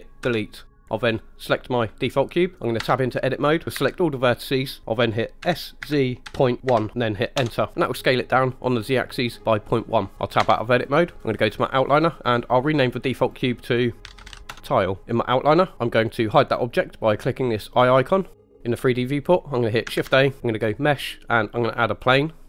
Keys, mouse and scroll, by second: 0.2 Delete, 1.4 click, 2.8 Tab, 3.7 a, 5.4 s, 5.8 z, 6.6 ., 6.6 1, 7.3 Return, 7.7-9.2 middle drag, 10.4 Tab, 13.1 click, 13.3-14.5 drag, 18.3 click, 20.0 shift+a.